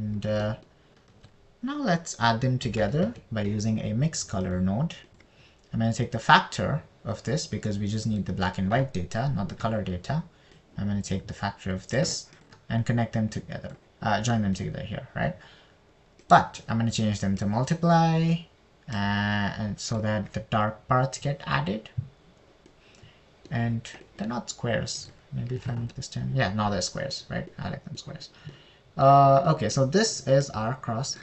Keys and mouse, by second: 1.8 middle click, 2.5 shift+a, 6.5 click, 7.5 click, 12.0 drag, 14.2 click, 17.8-19.0 drag, 20.4 middle click, 20.7 click, 24.1 middle click, 26.4 click, 30.0 middle click, 30.9 middle click.